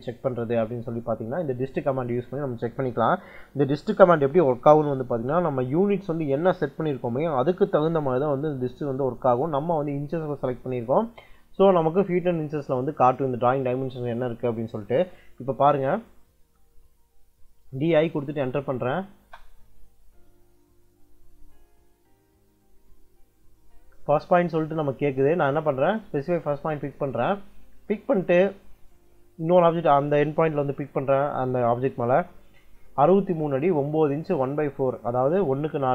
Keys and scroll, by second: 17.2-19.0 typing.